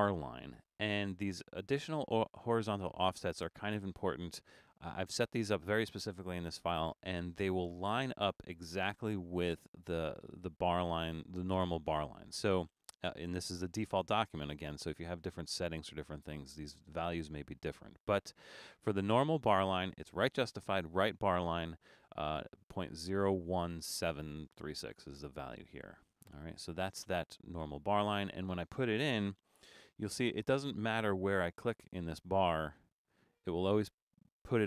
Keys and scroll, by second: 31.1 BackSpace.